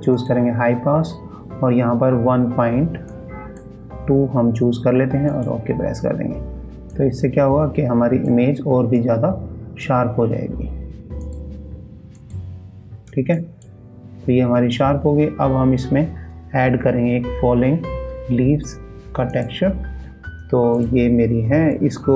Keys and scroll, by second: 6.2 ctrl+shift+e, 6.3 ctrl+space, 13.1 ctrl+space, 16.3 ctrl+s.